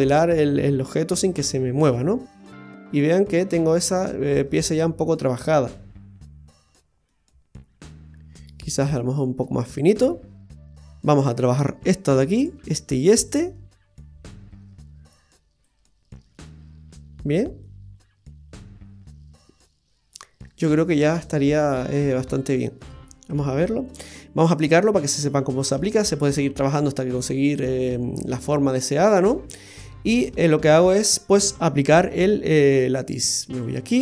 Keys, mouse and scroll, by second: 1.3 scroll up 1, 1.5-2.0 scroll down 4, 2.0 middle click, 4.1-4.4 scroll up 1, 4.4 scroll down 1, 4.6 scroll down 4, 5.5-6.7 scroll down 7, 6.7-7.1 scroll down 1, 7.1 middle click, 8.7-9.9 scroll up 15, 9.9 middle click, 10.8-12.3 scroll down 5, 12.3 right click, 13.2 shift+right click, 13.9 middle click, 15.6 click, 17.6 middle click, 23.3 Tab, 25.4-25.8 scroll down 2, 25.8 middle click, 27.4 middle click, 30.1 click, 33.6 right click.